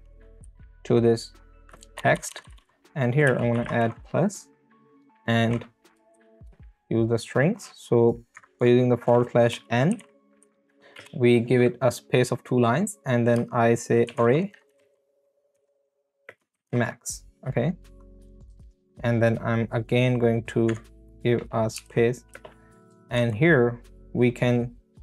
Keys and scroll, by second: 0.4 Left, 2.0 Right, 3.3 space, 3.7 space, 9.5 Left, 9.9 n, 10.4 n, 10.5 Right, 10.7 Left, 11.0 space, 13.8-17.2 typing, 18.4 x, 18.7 space, 21.8 n, 22.3 space, 23.2 Right.